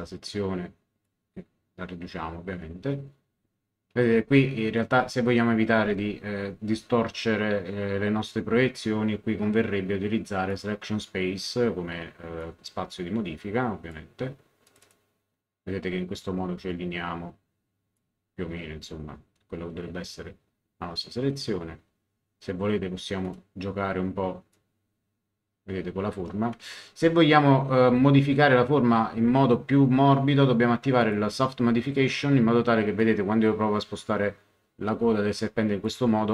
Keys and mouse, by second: 5.0 ctrl+z, 5.7 ctrl+z, 10.5 click, 12.4 click, 14.6 click, 16.7 click, 23.2 click, 24.5 click, 26.7 ctrl+z, 31.0 click, 33.0 click.